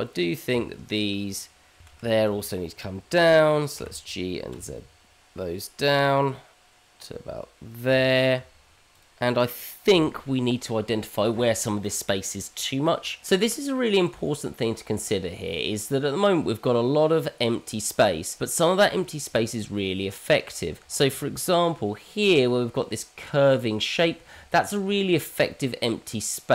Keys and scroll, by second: 1.9 Tab, 3.5 shift+z, 4.2 shift+z, 4.5 shift+z, 5.1 g, 8.5 Tab, 24.5 ctrl+z.